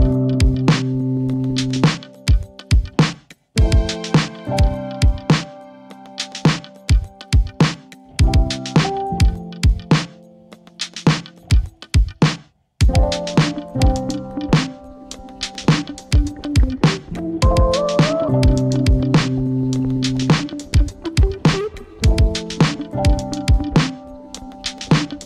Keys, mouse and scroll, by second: 18.3-18.8 scroll up 1.